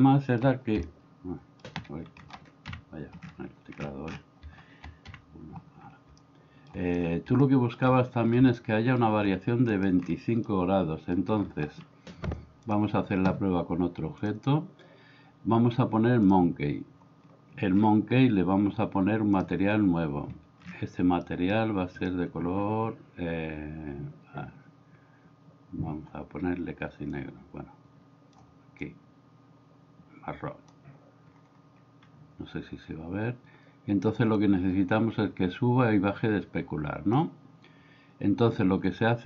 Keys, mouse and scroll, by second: 0.8-1.7 shift+middle drag, 2.7 KP_1, 5.1 KP_1, 6.1-6.7 shift+middle drag, 7.4-7.7 shift+middle drag, 8.5-9.0 middle drag, 10.5-11.2 middle drag, 14.3-16.3 drag, 19.4 click, 21.5 middle click, 22.0 click, 34.4-37.2 drag.